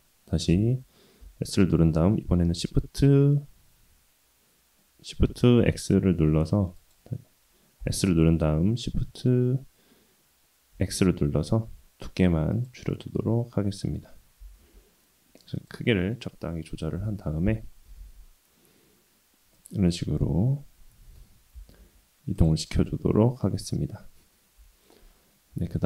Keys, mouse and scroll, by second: 0.5 s, 7.8 s, 12.9-13.9 middle drag, 14.4 s, 16.9 KP_1, 17.8 g, 19.9-21.2 middle drag, 21.5 g, 22.6-23.5 middle drag, 23.7-24.6 scroll up 1, 24.6 KP_1, 25.5 Tab.